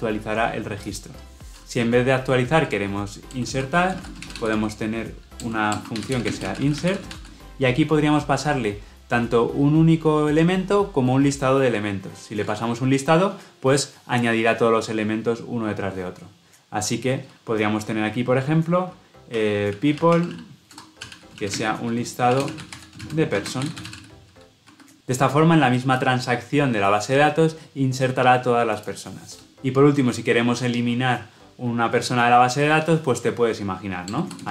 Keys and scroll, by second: 5.4 Return, 24.6 Escape.